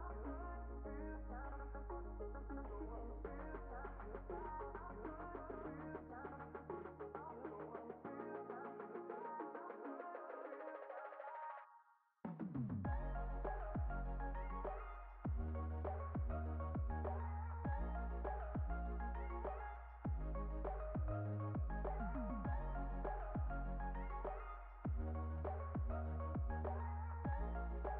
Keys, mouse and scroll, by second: 1.6 click, 3.0 click, 3.6-5.0 drag, 5.8 click, 6.5 click, 7.1-9.3 drag, 11.0-15.5 drag, 24.4 click, 26.5 click, 27.1 click, 27.2 click, 27.5 click.